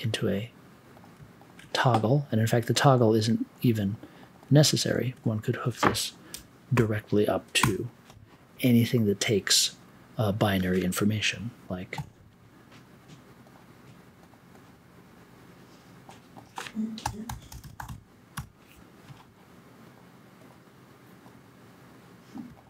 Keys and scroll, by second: 7.6 BackSpace, 11.9 a, 16.7-18.8 typing.